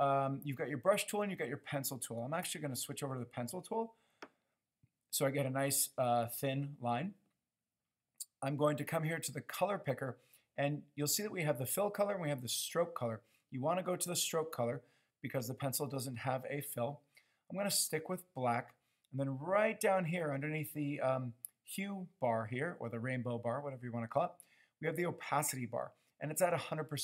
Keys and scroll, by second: 2.6 p.